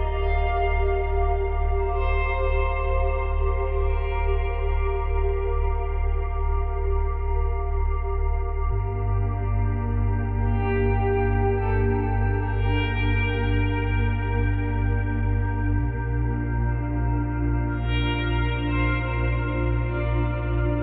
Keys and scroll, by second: 0.5 ctrl+z, 2.6 Delete, 6.9 space, 9.4 space, 15.1 space, 18.9 Delete.